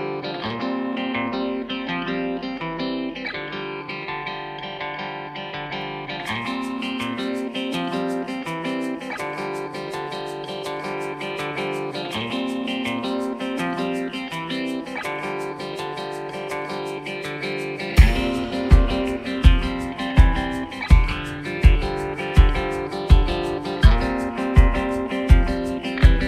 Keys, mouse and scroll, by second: 0.1 double click, 9.5 space, 10.5 v, 21.7 double click, 22.8 space.